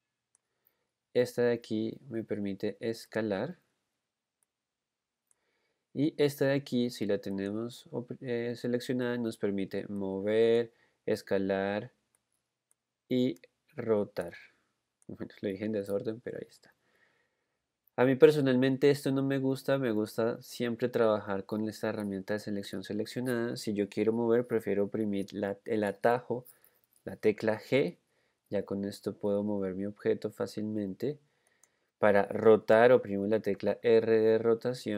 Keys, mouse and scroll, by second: 3.4 click, 4.8 click, 4.9-8.1 drag, 8.1 click, 10.6-17.6 drag, 20.2 click, 27.7 g, 33.9 r.